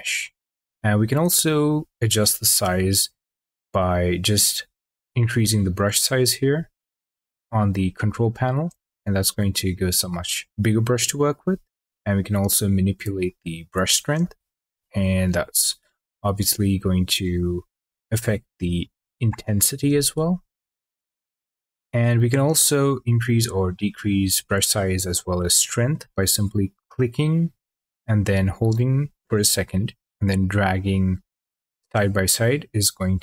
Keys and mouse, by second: 5.0-8.1 drag, 12.1-13.6 drag, 14.9 shift+click, 20.5-21.4 drag, 25.4 shift+click.